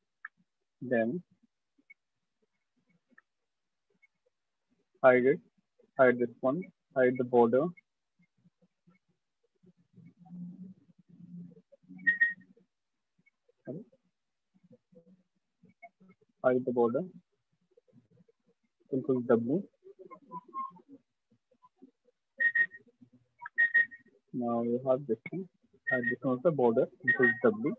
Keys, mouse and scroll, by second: 0.2 click, 0.3 shift+click, 0.9 click, 1.5 click, 2.9 click, 3.4 click, 4.1 click, 5.1 click, 5.9 click, 6.8 click, 9.4 click, 10.4 right click, 11.2 click, 12.1 click, 12.8 click, 13.5 click, 14.9 click, 15.9 click, 16.5 click, 17.3 click, 17.9 shift+click, 18.6 ctrl+w, 22.5 click, 24.3 click, 24.6 click, 25.3 click, 26.2 click, 26.9 ctrl+w.